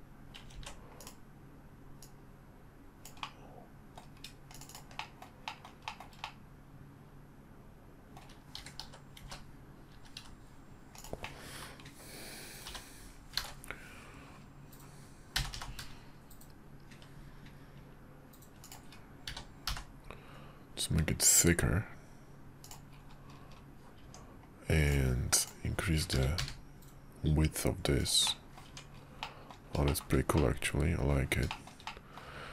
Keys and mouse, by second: 0.5 ctrl+z, 1.0-3.3 middle drag, 3.3-4.8 drag, 4.8 shift+middle click, 5.0 shift+middle click, 5.4 shift+middle click, 5.8 shift+middle click, 6.2-8.2 middle drag, 8.5 s, 11.2 middle click, 12.6 h, 13.4 ctrl+z, 15.3 g, 19.3 s, 24.0 Tab, 26.1 s, 28.2 middle click, 28.6 Tab, 29.2 middle drag, 29.9 shift+middle drag, 30.3-31.1 middle drag, 31.5 shift+middle click, 31.8-32.2 middle drag.